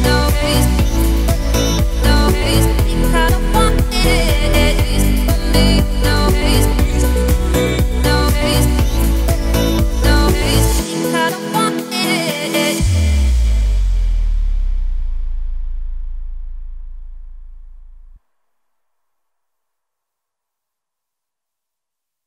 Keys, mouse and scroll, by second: 0.6 ctrl+r, 4.4 f, 5.1-5.4 scroll up 1, 5.4-7.5 middle drag, 7.5 Tab, 7.7 scroll down 1, 7.8-8.7 middle drag, 8.7 Tab, 9.1-10.1 middle drag, 10.1 ctrl+r, 11.2 middle click, 11.5 scroll up 2, 11.8 g, 13.7 Tab, 13.8 scroll down 2, 13.9-14.9 middle drag, 14.9-15.3 scroll up 1, 15.3-15.9 middle drag, 15.9 Tab, 16.3-16.7 scroll up 1, 16.7 ctrl+b, 20.7 Tab, 20.9-21.9 middle drag, 21.9-22.2 right drag.